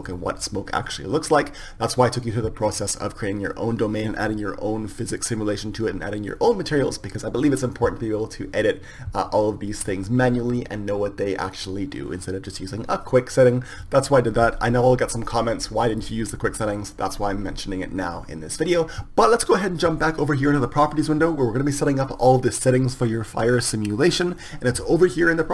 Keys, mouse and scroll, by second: 17.0 click, 17.6-19.0 drag.